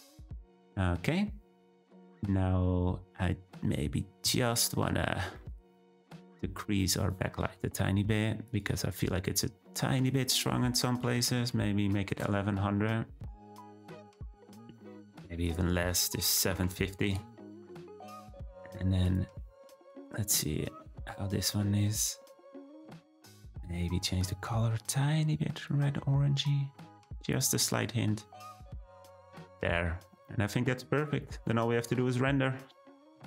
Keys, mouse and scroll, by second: 0.0 scroll down 1, 0.6 scroll down 1, 5.3-6.1 middle drag, 6.1 scroll down 1, 7.1 click, 12.1 1, 12.9 `, 15.4-18.7 drag, 19.6 g, 24.3 click, 27.7-28.1 drag, 28.1-29.2 scroll down 1, 29.2-30.1 scroll up 3, 30.1 click.